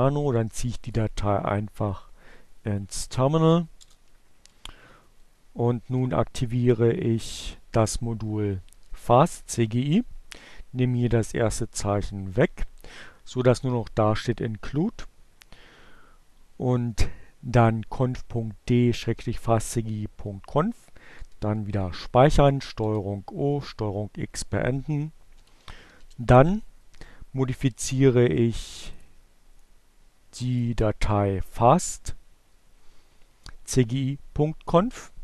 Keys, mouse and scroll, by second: 0.0-1.1 drag, 1.3 click, 2.6 Page_Down, 4.7 Page_Up, 5.7 Down, 7.6 Delete, 20.5 ctrl+o, 21.0 Return, 22.3 ctrl+x, 23.0-25.0 typing, 27.0 click, 28.2 click, 29.5 click.